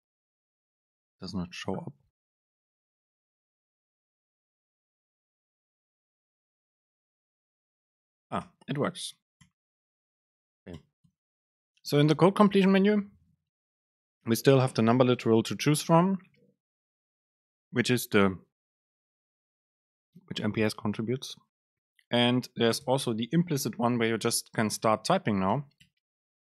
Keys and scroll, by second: 0.4 super+space, 6.4 super+space, 8.5 BackSpace, 10.1 Return, 10.7 Up, 10.9 BackSpace, 11.2 Return, 11.6 super+space, 24.7 BackSpace, 25.6 Return, 26.0 BackSpace.